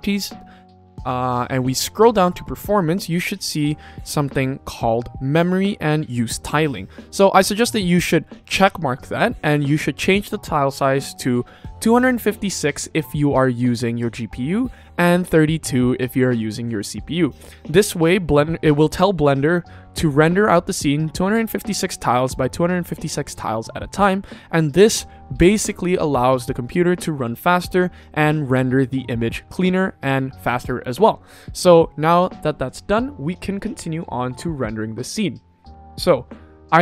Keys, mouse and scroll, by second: 0.6-1.7 scroll down 4, 1.7-3.0 scroll down 1, 7.6 click.